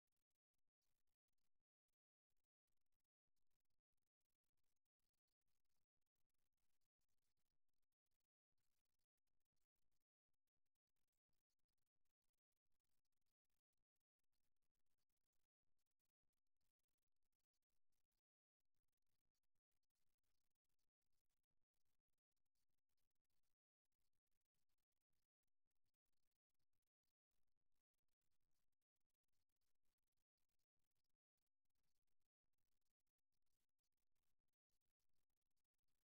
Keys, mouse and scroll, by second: 3.8 KP_1, 5.1 middle click, 7.9 middle click, 8.9-12.6 middle drag, 12.6-14.4 drag, 17.5-20.6 middle drag, 35.6-36.0 middle drag.